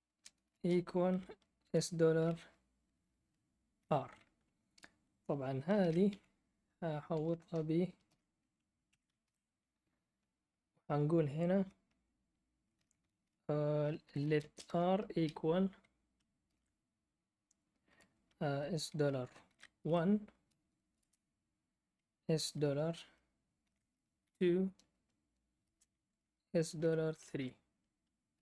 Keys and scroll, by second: 0.1-1.6 typing, 3.7 r, 5.8-6.1 typing, 6.6-7.1 Left, 7.2 Right, 8.1 ", 8.9 Caps_Lock, 8.9 Escape, 9.2 shift+o, 13.8-15.2 typing, 16.4 ", 19.2-19.9 typing, 21.0 space, 23.6-24.2 typing, 25.6 space, 26.6-28.3 typing.